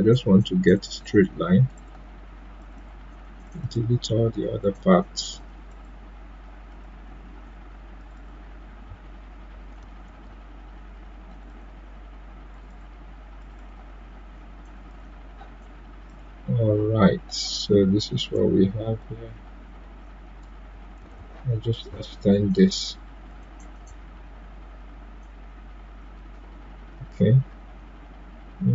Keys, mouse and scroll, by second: 3.9 click, 10.0 ctrl+z, 11.3-20.9 drag, 20.9 ctrl+z, 21.9-28.7 drag.